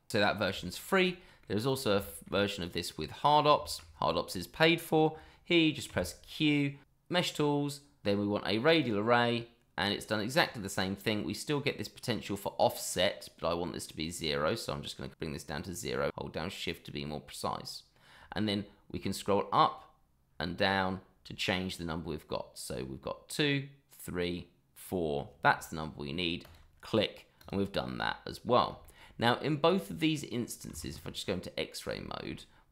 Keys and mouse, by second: 0.6 shift+middle drag, 1.1 middle drag, 1.6 click, 2.0 shift+middle drag, 3.1-3.4 middle drag, 3.6 shift+middle drag, 5.9 q, 26.4 click, 27.4 click, 28.8 shift+middle drag, 29.6 click, 30.1 middle drag, 30.7 shift+z, 31.2-31.6 middle drag, 32.0 shift+middle drag.